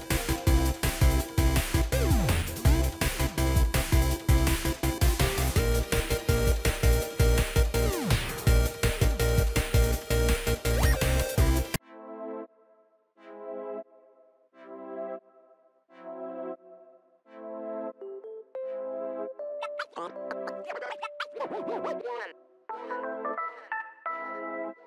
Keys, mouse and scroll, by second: 6.5 ctrl+d, 19.0-20.9 typing, 23.5 double click.